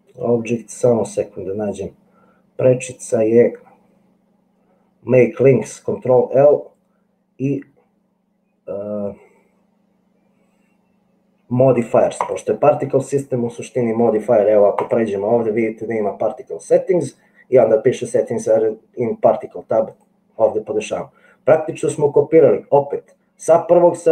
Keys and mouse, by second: 15.0 click.